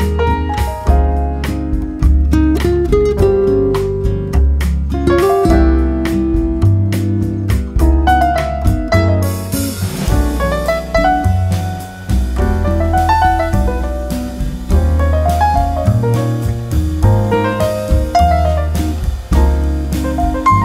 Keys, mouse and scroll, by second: 2.4-3.8 drag, 3.9 click.